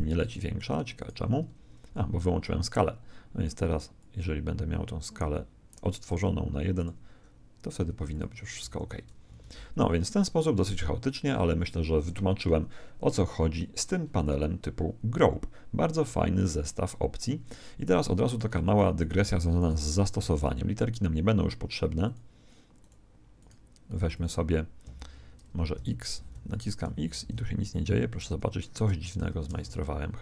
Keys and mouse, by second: 0.9 right click, 2.7-5.6 drag, 6.1-9.3 drag, 6.1 1, 8.6 Escape, 9.3 alt+a, 11.9 Escape, 18.3-21.5 right drag, 18.5 x, 19.1 x, 20.1 x, 22.7-25.8 drag, 23.4 right click, 23.9-27.3 typing, 26.5 right click, 28.7 Tab, 29.4 Tab.